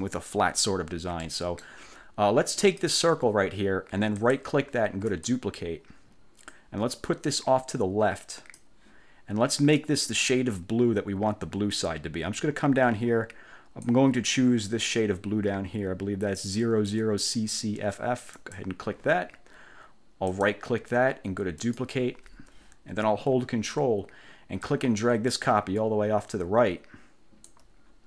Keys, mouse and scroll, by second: 1.4 middle click, 1.8 click, 2.8 click, 4.3 click, 5.2 click, 6.6-8.9 drag, 9.9-14.2 drag, 18.5 click, 20.4 right click, 21.7 click, 24.8-27.8 ctrl+drag.